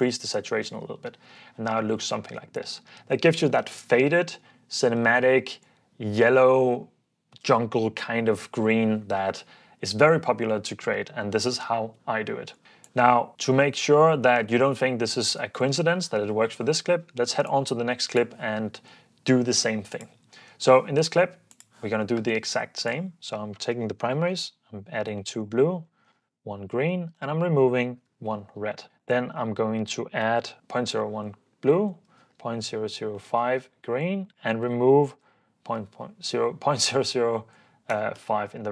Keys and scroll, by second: 0.1 super+f, 0.8 super+d, 11.9 Escape, 23.8-24.7 typing, 25.8-28.6 typing, 29.7-30.6 typing, 32.1-33.1 typing, 33.1 Return, 34.8-36.2 typing, 37.9 typing, 38.1 Return.